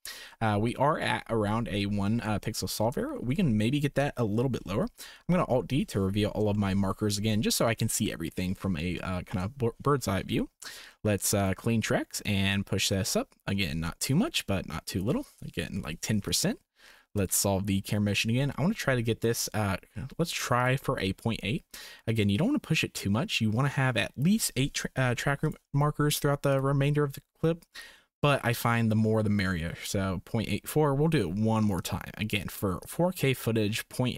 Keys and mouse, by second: 2.7 shift+click, 3.2 ctrl+s, 5.2 alt+d, 6.5 shift+click, 9.1 shift+click, 11.4 drag, 12.2-15.0 drag, 15.7 Delete, 17.2-18.7 drag, 20.6 click, 21.7-24.2 drag, 25.0 Delete, 26.6-28.4 drag, 31.8 click, 32.9-34.1 drag.